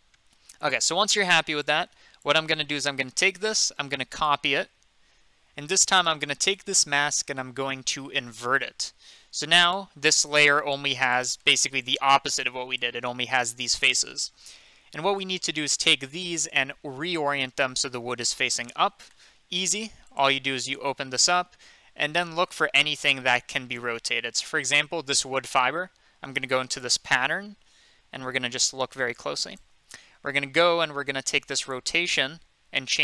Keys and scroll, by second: 4.1 ctrl+c, 4.5 ctrl+v.